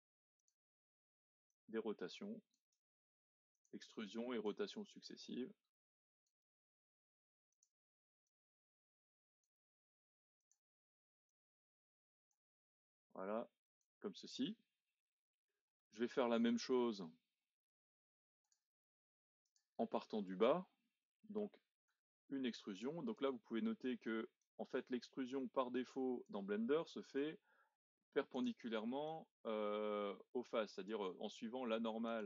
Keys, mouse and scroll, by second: 1.5 click, 2.8 e, 4.4 click, 6.5 e, 8.2 click, 9.6 e, 11.3 click, 12.6 e, 14.3-18.4 middle drag, 18.4 click, 19.4 shift+click, 19.9-22.0 middle drag, 22.0 e, 24.4 click, 27.3 e, 29.0 click, 31.1 e.